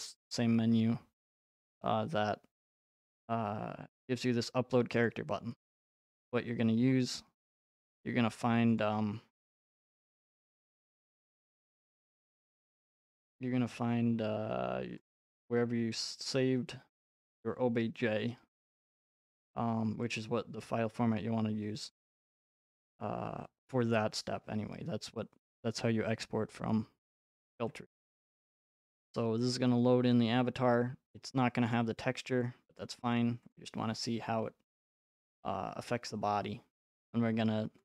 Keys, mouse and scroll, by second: 1.3-4.5 drag, 5.1-7.8 drag, 8.8 click, 11.1 click, 13.3 click, 13.9 scroll, 15.1 click, 15.1 scroll, 17.1 click, 21.9-24.0 drag, 25.5-27.6 drag, 27.7 alt+Tab, 31.7 right click, 32.8 click, 33.5 click.